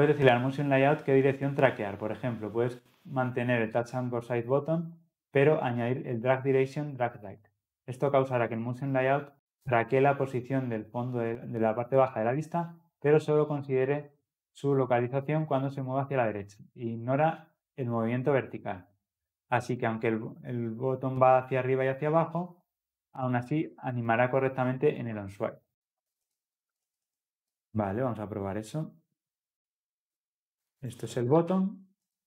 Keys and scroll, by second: 32.0 Tab.